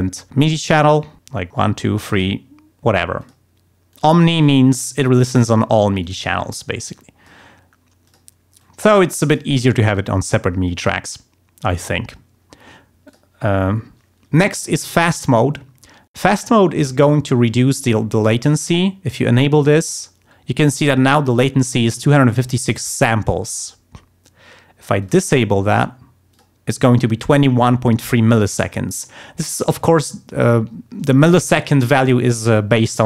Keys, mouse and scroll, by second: 0.7 click, 1.5 click, 2.0 click, 3.2 click, 3.9 click, 4.3 click, 5.3 click, 6.0 click, 6.5 click, 6.9 click, 8.1 click, 8.6 click, 10.7-12.3 drag, 13.1 click, 19.7 click, 22.7 click, 25.0 click, 26.3 click.